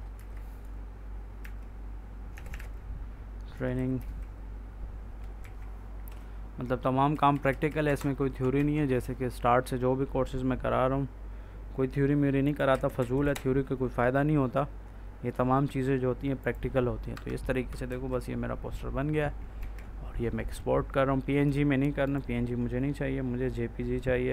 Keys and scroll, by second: 0.0-4.4 typing, 5.3 ctrl+s, 6.0 Right, 7.7 Up, 8.4 ctrl+s, 12.6 Up, 13.1 Right, 17.0 F4, 17.8 ctrl+s, 19.5 ctrl+e.